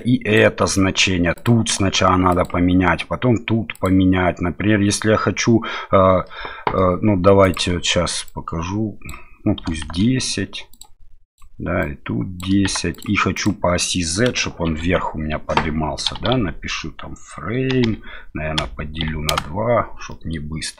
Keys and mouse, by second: 2.4-3.9 drag, 6.2 middle click, 7.4-10.8 drag, 11.4-13.0 drag, 13.3-19.8 drag, 20.1 middle click.